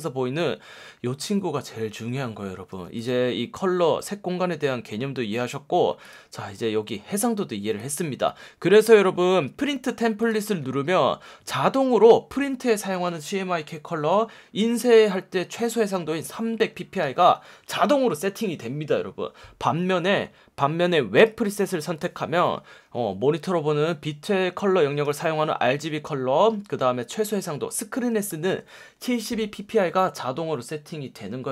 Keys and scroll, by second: 2.7 F1, 11.6 F1, 17.0 F1, 25.0 F1, 28.2 F1.